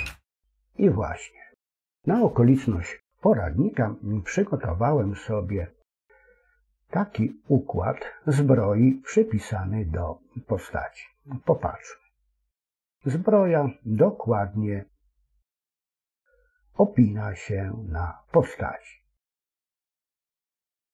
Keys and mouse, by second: 9.3-19.2 middle drag.